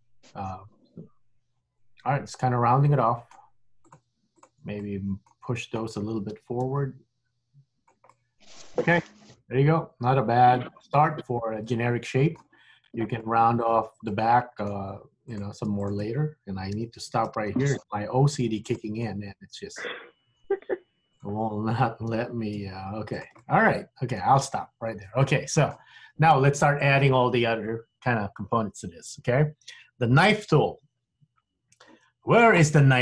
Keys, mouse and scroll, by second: 0.0 middle click, 4.0 click, 4.4 shift+click, 4.8 middle click, 6.4 g, 8.2 middle click, 13.3 middle click, 14.2 middle click, 15.3 click, 15.9 shift+click, 16.8 g, 19.2 middle click, 21.2 click, 22.2 g, 23.5 middle click, 24.9-25.3 scroll up 2, 25.3 middle click.